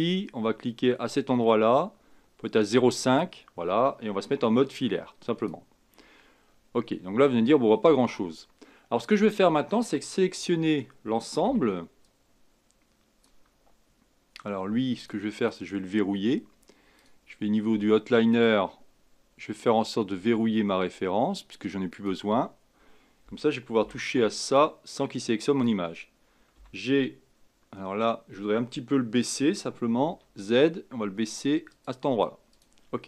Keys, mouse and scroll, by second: 1.1-4.2 drag, 4.5 z, 6.4-6.8 scroll up 3, 7.7 scroll down 1, 10.4 a, 11.4 b, 15.0 click, 15.4 click, 16.9-20.0 drag, 21.9 click, 23.8 b, 26.6 g, 32.5 click.